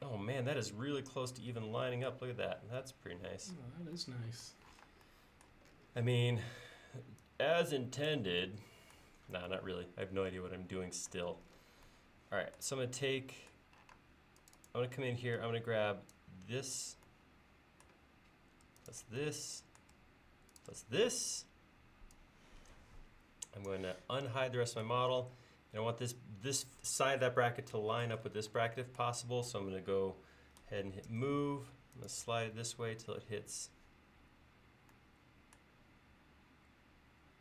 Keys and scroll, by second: 4.7 p, 14.0 space, 31.1 m.